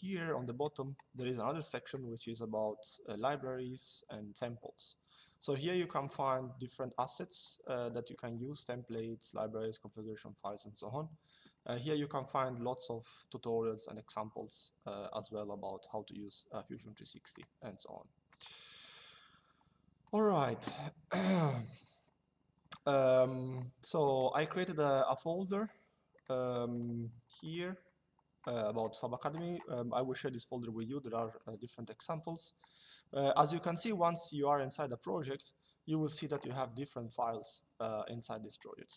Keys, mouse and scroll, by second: 18.0 right click, 19.7 click, 21.0 click, 25.3 click, 25.8 right click, 26.4 click.